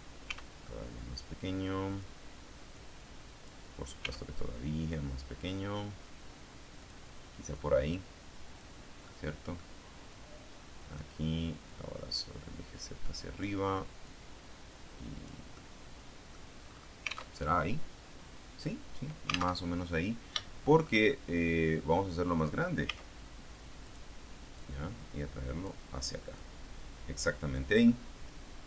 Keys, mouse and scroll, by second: 0.1 s, 1.8 click, 2.6 click, 3.9 s, 6.7 click, 7.4-8.7 drag, 8.9 click, 9.1 middle click, 10.0-11.1 drag, 11.7-13.5 drag, 13.9-15.3 drag, 15.4 click, 15.5 middle click, 16.4-16.9 scroll up 1, 17.3 alt+Tab, 19.5 alt+Tab, 20.3 shift+middle click, 21.3-22.5 middle drag, 22.7 s, 23.7 click, 24.5-25.7 drag, 26.4-27.7 drag, 27.8-28.6 middle drag.